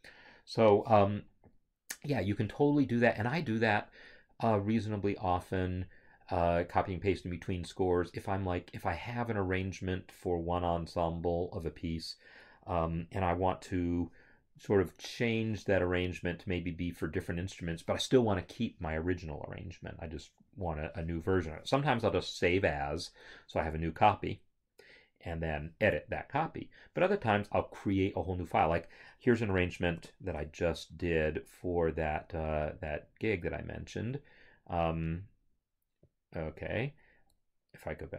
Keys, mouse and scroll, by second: 29.9 ctrl+o, 36.0 click.